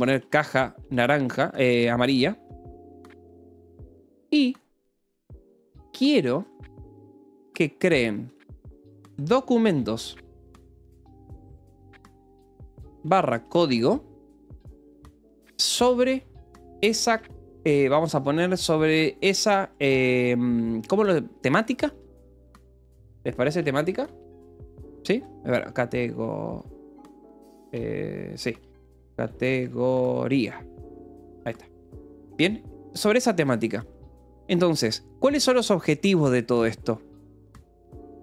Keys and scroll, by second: 0.0-14.1 typing, 3.3 Escape, 15.4-17.6 typing, 19.4 i, 19.8 BackSpace, 21.5-25.2 typing, 26.3-31.5 typing, 31.2 Escape, 33.0 o, 36.4 Return, 37.1-38.2 typing.